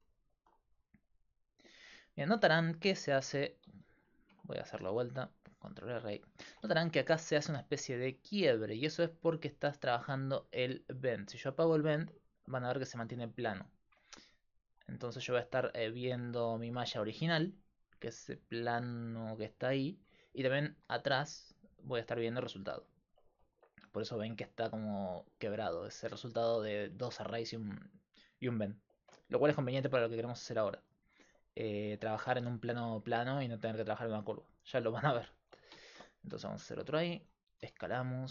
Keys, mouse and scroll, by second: 2.5 Tab, 3.7 ctrl+z, 4.3 Tab, 4.9 ctrl+r, 6.5 Tab, 11.3-13.2 drag, 14.6 Tab, 15.2 Tab, 16.9-18.4 drag, 18.7 click, 23.5 ctrl+r, 35.9 ctrl+r, 37.6 s.